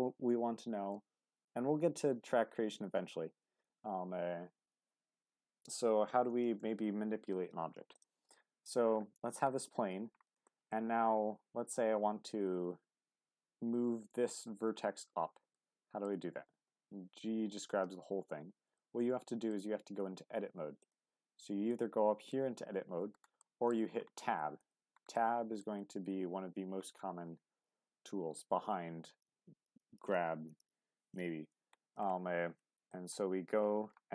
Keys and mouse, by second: 6.4 shift+a, 10.4 shift+middle drag, 15.5-16.1 middle drag, 16.6 g, 18.7-19.5 middle drag, 20.9-22.3 drag, 22.3 middle click, 22.7 Tab, 23.4 middle click, 25.1-25.6 middle drag, 33.0 click.